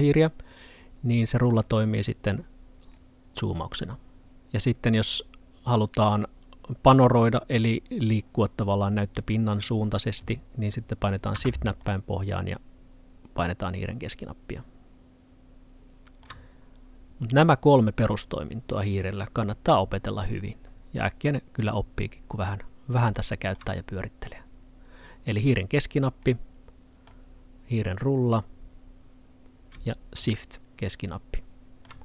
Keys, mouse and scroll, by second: 1.1-1.6 scroll up 1, 1.6-2.2 scroll down 1, 2.2-2.9 scroll up 1, 2.9-4.2 scroll down 1, 4.2 scroll up 1, 4.3 middle click, 11.9 middle click, 23.2 middle click, 27.7 scroll up 1, 27.9-28.2 scroll down 1, 28.2 scroll up 1, 28.5-30.3 scroll down 1, 30.3 middle click.